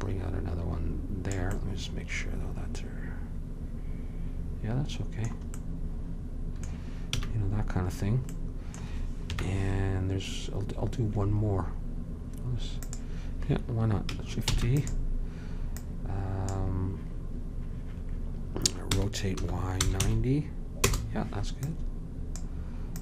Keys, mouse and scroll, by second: 1.6-3.4 middle drag, 7.3 a, 9.4 KP_1, 12.9-14.6 drag, 14.6 shift+d, 19.0 r, 21.7-23.0 drag.